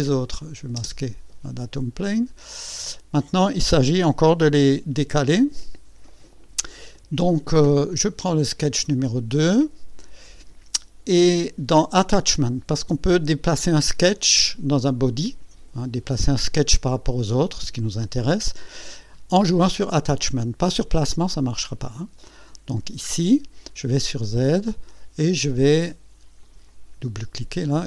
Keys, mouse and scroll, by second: 0.4 click, 0.8 space, 1.9-3.0 drag, 3.2-3.8 drag, 4.5 KP_6, 9.0 click, 13.3 click, 22.5 click, 23.7 click, 24.9-25.2 scroll down 2, 26.4 click, 27.3 scroll down 2.